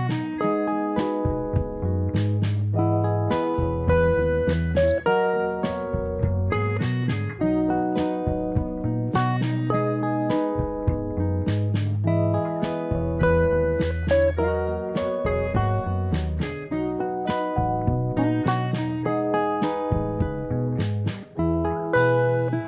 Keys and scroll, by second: 14.8 5, 15.0 0, 15.8 Return, 18.1 ctrl+=.